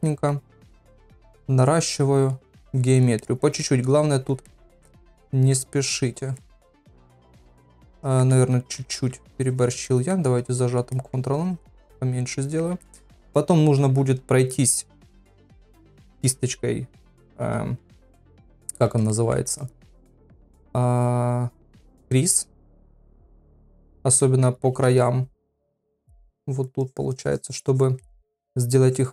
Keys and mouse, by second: 0.1 middle click, 0.7 click, 1.9 click, 2.6 click, 3.2 middle click, 4.0 click, 4.5 middle click, 5.3 middle click, 6.0 click, 6.4 middle click, 8.0 middle click, 8.4 ctrl+z, 8.8 ctrl+z, 9.4 ctrl+click, 9.9 middle click, 10.5 ctrl+click, 10.9 middle click, 11.4 click, 11.8 middle click, 12.8 shift+middle click, 16.1 KP_Divide, 17.1 KP_Divide, 18.3 middle click, 19.1 shift+middle click, 19.6 ctrl+middle click, 23.0 middle click, 23.5 ctrl+middle click, 23.8 middle click, 24.2 ctrl+middle click, 25.1-25.6 [, 26.5 click, 26.5 [, 26.8 click, 27.1 click, 28.0 middle click, 28.9 click.